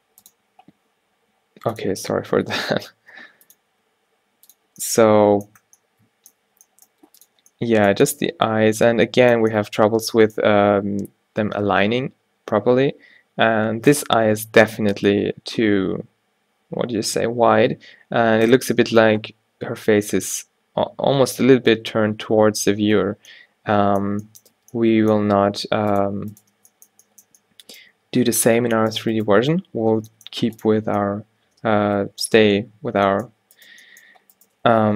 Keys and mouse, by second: 3.2 r, 3.8 g, 6.7 g, 13.1 Tab, 24.7 Tab, 25.6 r, 26.2 g, 26.6 Tab, 28.5 Tab, 28.8 g, 29.5 Tab, 29.9 Tab, 30.2 g, 30.8 Tab, 32.9 Tab, 33.1 g, 33.8 g, 34.6 g.